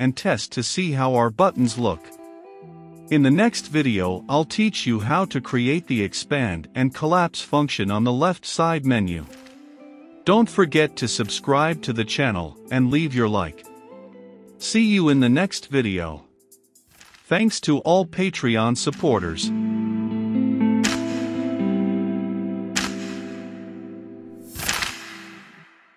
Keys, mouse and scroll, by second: 3.3-8.3 drag.